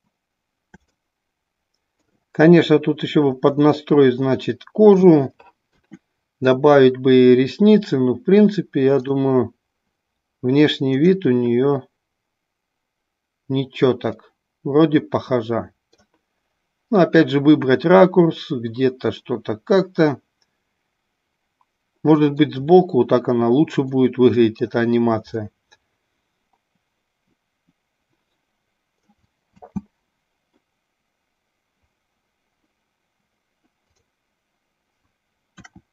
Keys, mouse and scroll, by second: 1.4-2.6 middle drag, 4.1-5.6 middle drag, 9.3 click, 14.9-16.5 middle drag, 18.2-22.4 middle drag, 24.1 middle click, 26.2-29.2 middle drag, 29.6 space.